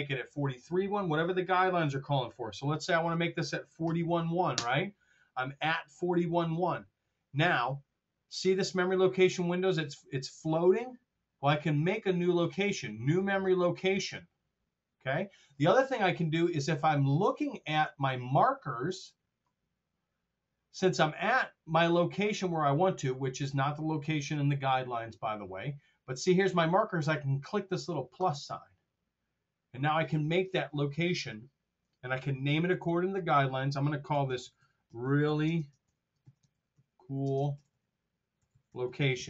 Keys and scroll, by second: 3.8 KP_4, 3.9 KP_1, 34.0-39.2 typing.